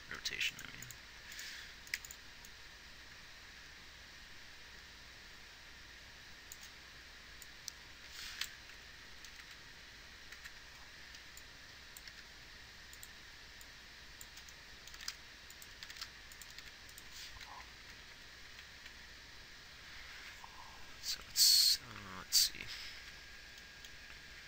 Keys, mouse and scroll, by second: 2.3 x, 9.1 Left, 9.8 Right, 10.8 Right, 12.5 g, 15.3 r, 16.2 r, 18.1-18.5 Left, 18.9 Right, 19.2 Right, 20.6 Left, 21.6 Right, 22.0 Left, 22.4 Left, 23.4 Right.